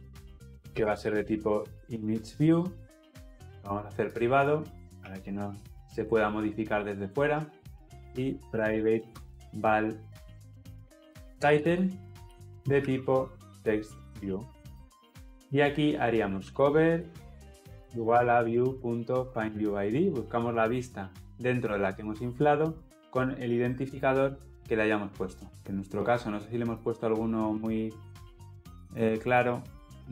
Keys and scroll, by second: 2.3 Return, 14.6 Return, 19.8 Return, 24.1 Escape, 25.5 ctrl+b.